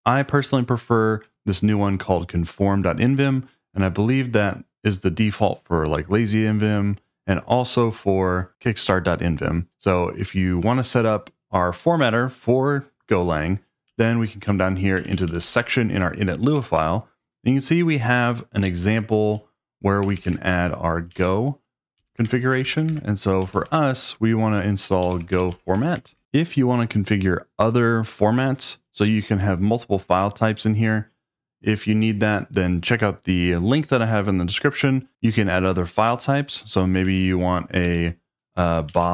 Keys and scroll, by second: 13.9-16.6 typing, 19.8-26.0 typing, 36.9-39.1 typing.